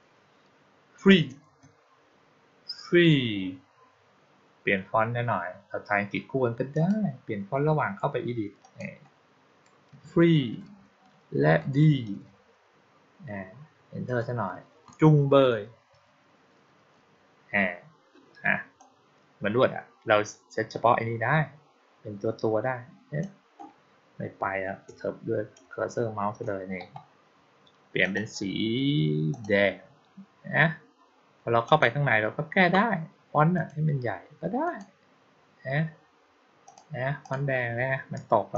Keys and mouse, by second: 6.6 click, 8.5 click, 18.6-23.1 drag, 27.9 click, 29.2 click, 31.5 click, 33.4 click, 34.5 click, 36.5 click, 37.1 click, 38.4-38.5 drag.